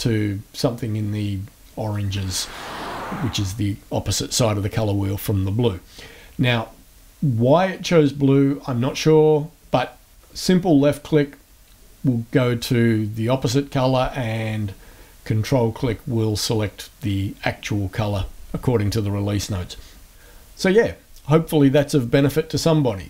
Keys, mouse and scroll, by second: 10.2 click, 14.3 ctrl+click, 14.9 ctrl+click.